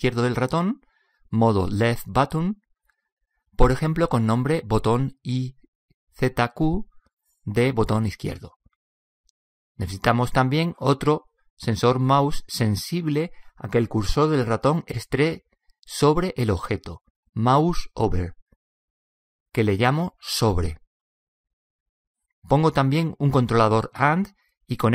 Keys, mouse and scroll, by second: 12.1 click.